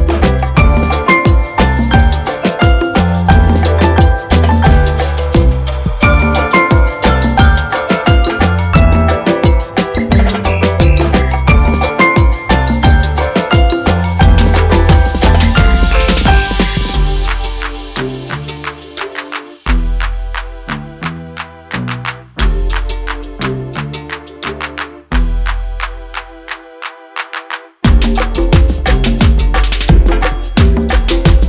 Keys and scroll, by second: 12.1 e, 22.6 e, 30.8 s.